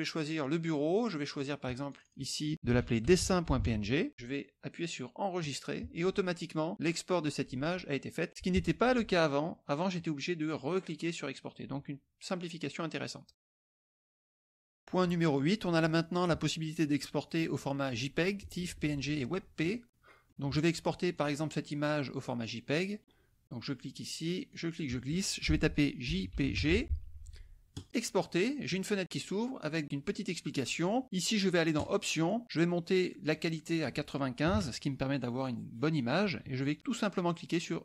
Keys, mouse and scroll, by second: 0.4 click, 1.4 click, 2.4-4.1 typing, 5.4 click, 13.0 click, 19.6 click, 21.3 click, 24.5 click, 26.1 j, 26.5 g, 27.7 click, 31.8 click, 33.3 click, 33.7 click, 34.5 KP_5.